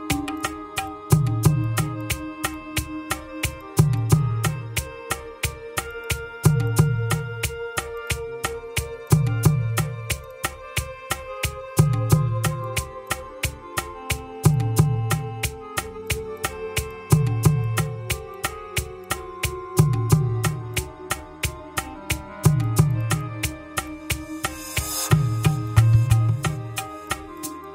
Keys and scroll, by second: 2.3 ctrl+c, 4.7 ctrl+v, 5.1 Return, 7.1 Return, 10.5 Escape, 12.1 Escape, 15.6 Escape, 17.0 Escape, 19.1 Escape, 20.7 Escape, 24.8 Return, 25.0 Escape, 26.8 Escape.